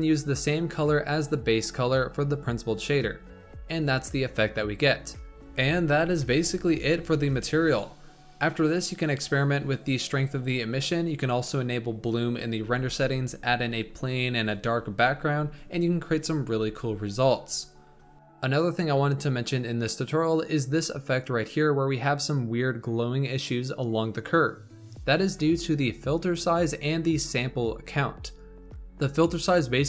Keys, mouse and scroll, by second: 2.8 scroll down 2, 3.3 scroll up 2, 6.3 click, 6.7 scroll down 4, 7.1 shift+middle drag, 7.3 shift+a, 8.0-8.3 scroll down 3, 8.3 s, 9.4 click, 9.8-10.5 drag, 12.0 click, 12.8 click, 13.0 click, 13.4-14.0 scroll up 4, 14.0 click, 14.5 shift+middle click, 15.1 click, 15.4-16.8 drag, 17.3-19.7 middle drag, 26.7-27.3 scroll up 3, 27.3-27.7 scroll up 6, 28.3-28.7 scroll down 6.